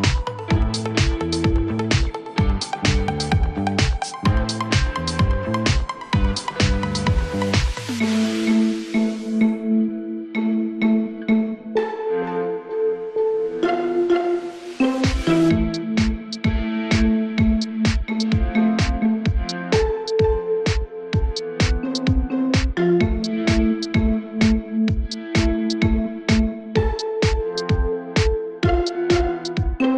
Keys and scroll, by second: 7.1 Escape, 9.1 F3, 9.3 Escape, 9.6 F2, 13.1-15.4 typing, 15.9 Return, 16.9-18.9 typing, 19.6 ctrl+space, 25.0 ctrl+k.